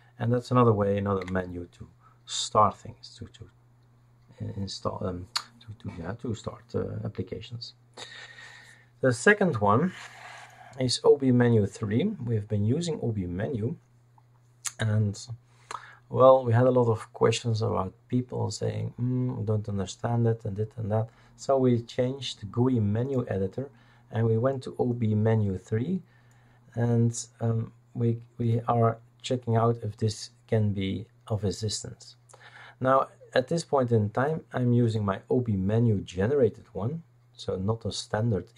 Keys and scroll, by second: 0.0-0.2 typing, 1.2 Escape.